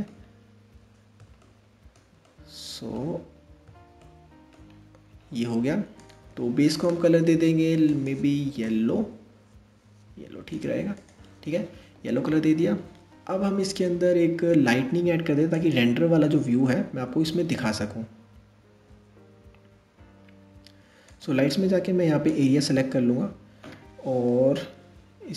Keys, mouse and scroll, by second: 0.0-1.0 scroll up 2, 1.0-2.7 shift+middle drag, 2.7 scroll up 1, 3.6-4.3 shift+middle drag, 4.3-4.7 scroll up 1, 5.6 click, 6.3-7.7 drag, 12.8-13.9 scroll down 6, 14.4 shift+a.